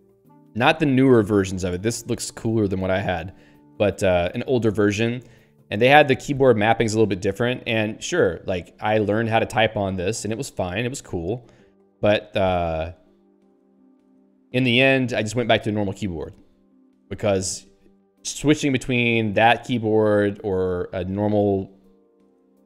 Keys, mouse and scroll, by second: 17.9 q.